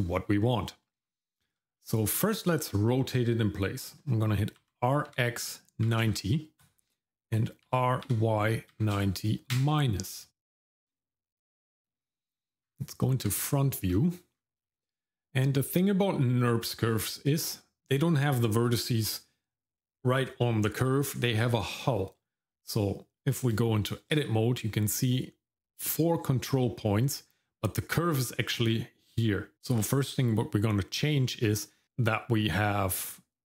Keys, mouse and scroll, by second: 1.0 shift+middle click, 1.8 middle click, 2.2 shift+middle click, 4.6 r, 13.9 middle click, 14.3-14.6 scroll up 1, 14.6 middle click, 15.4-15.7 scroll down 1, 15.7 middle click, 23.2 Tab, 27.4-29.5 scroll up 1.